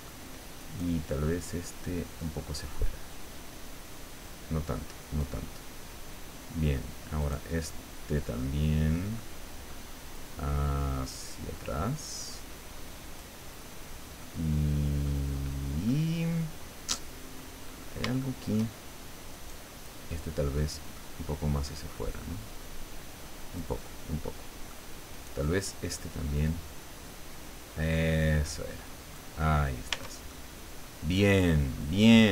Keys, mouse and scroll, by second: 0.6 right click, 2.2-5.4 drag, 7.2 right click, 8.4 middle click, 9.2 middle click, 10.2-13.4 drag, 14.2 middle click, 15.3-15.6 scroll down 1, 15.9-17.6 middle drag, 17.7-18.3 scroll up 2, 18.3 shift+middle click, 18.8 shift+scroll up 1, 19.3 right click, 20.1 middle click, 21.0 click, 22.1-23.8 drag, 24.2 middle click, 25.1 right click, 26.5-29.4 drag, 29.9 Tab, 30.3-31.6 middle drag, 31.7 scroll down 2.